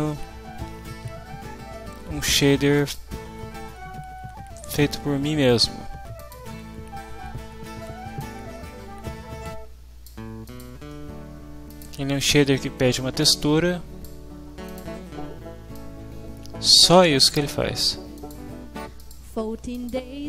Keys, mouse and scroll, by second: 2.8 click, 6.3 click, 8.3-10.2 drag, 10.5 click, 11.7 click, 12.9-14.2 drag, 14.7 click, 15.7-17.1 drag, 18.1 click, 19.7 click.